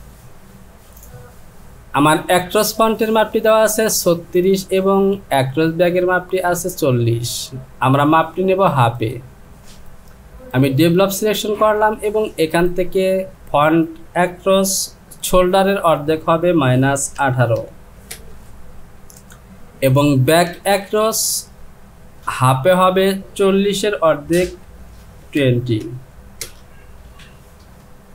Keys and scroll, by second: 15.7 Down, 16.6 KP_Subtract, 17.2 KP_1, 17.6 KP_8, 18.1 Return, 22.6 Down, 25.4 KP_2, 26.4 Return.